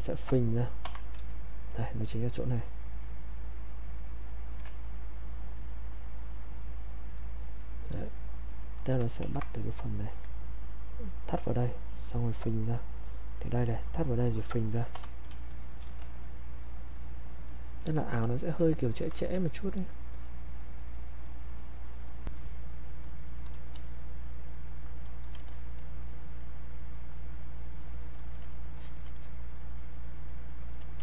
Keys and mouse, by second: 5.3 click, 9.2 ctrl+1, 9.6-14.2 drag, 16.6 click, 24.9 click.